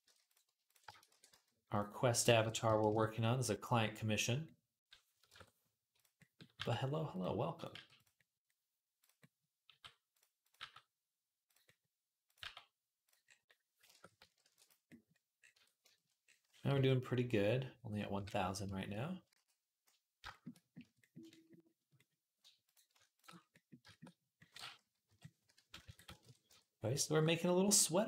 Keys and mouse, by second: 0.1 click, 0.1 middle click, 0.4 shift+a, 0.5 shift+click, 0.5 shift+middle click, 0.9 e, 2.2 s, 5.1 shift+Tab, 6.4 g, 7.6 g, 8.8 click, 9.5 g, 10.2 click, 10.2 middle click, 10.4 g, 12.1 click, 12.2 g, 13.7 shift+Tab, 14.2 ctrl+r, 14.5 middle click, 15.4 Tab, 16.5 /, 17.9-20.3 middle drag, 18.0 /, 19.6 ctrl+s, 20.3-21.9 drag, 20.6 Tab, 21.9 middle click, 22.5 shift+click, 23.0-27.8 shift+middle drag, 23.0 shift+a, 25.7 s, 26.3 Tab, 27.8-28.0 drag.